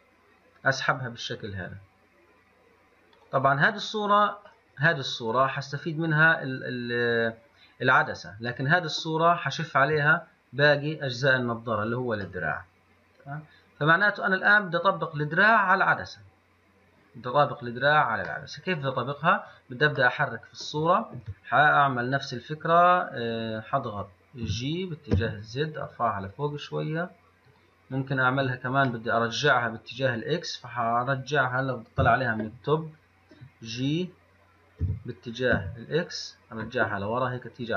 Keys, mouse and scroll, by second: 4.8-17.4 middle drag, 18.6-19.7 middle drag, 19.7 click, 20.3-25.4 middle drag, 29.4-32.2 middle drag, 32.2 KP_7, 35.1 g.